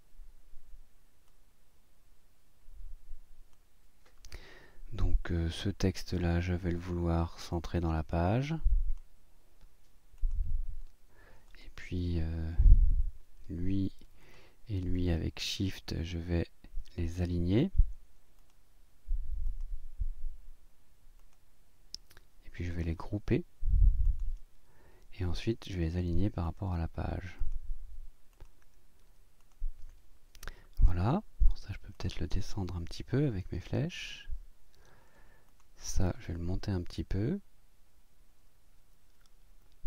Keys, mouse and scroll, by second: 1.8-3.7 drag, 7.5 click, 8.1-9.2 drag, 10.2 click, 11.5 click, 14.2 shift+click, 18.4 click, 19.5 click, 21.2 click, 22.7 right click, 24.0 click, 26.5 click, 27.4 click, 28.3 click, 29.4 click, 31.5 click, 31.9 click, 33.4 Down, 35.5 click, 36.5 Up.